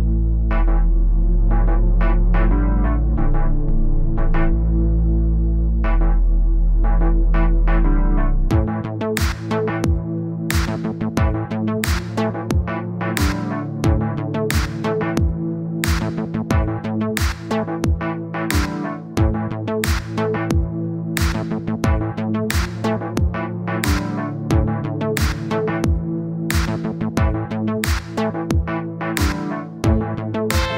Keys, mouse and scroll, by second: 0.4-2.7 drag, 3.5 middle click, 4.2-5.2 scroll down 1, 5.2-6.5 middle drag, 6.5 KP_1, 6.9-7.7 scroll up 1, 7.7-8.1 scroll up 1, 8.3-9.4 drag, 10.1 click, 10.4-13.8 drag, 13.8 middle click, 14.4 click, 14.9 middle click, 15.9 click, 16.3 middle click, 16.8-18.4 drag, 19.0 middle click, 19.3-20.0 scroll up 1, 20.0-22.9 middle drag, 23.9 click, 24.6-25.8 drag, 25.9 click, 26.1 middle click, 26.8 click, 27.1 middle click, 27.6 click, 27.9-29.1 middle drag, 29.3-30.7 drag.